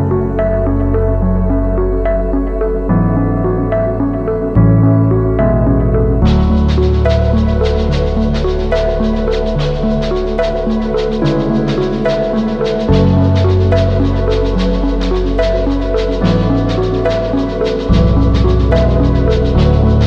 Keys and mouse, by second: 0.2 alt+shift+click, 0.7 ctrl+e, 1.1 a, 1.6 a, 1.8 u, 2.3 a, 2.8 shift+middle click, 3.9 a, 4.3 u, 7.0 shift+middle click, 7.6 a, 10.2 middle click, 10.8 shift+middle click, 11.6 shift+middle click, 11.9-13.6 middle drag, 15.6 click, 16.7 ctrl+click, 17.2 ctrl+e, 17.7 a, 18.1 middle click, 19.4 shift+middle click.